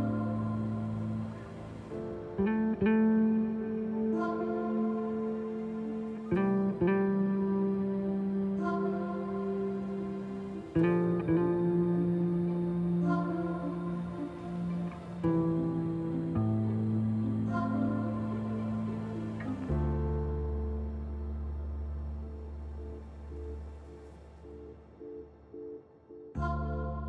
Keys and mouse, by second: 1.3-2.7 drag, 2.9 ctrl+a, 4.5 Tab, 5.5 alt+shift+click, 6.0 click, 7.3 click, 7.8 2, 8.1 alt+shift+click, 8.8 alt+shift+click, 9.5-12.1 middle drag, 12.5 shift+middle click, 16.1 shift+d, 19.1 middle click, 19.8 Tab, 20.6 click, 21.0 middle click, 21.2 click, 21.4 ctrl+z, 22.1 ctrl+shift+z, 23.6 g.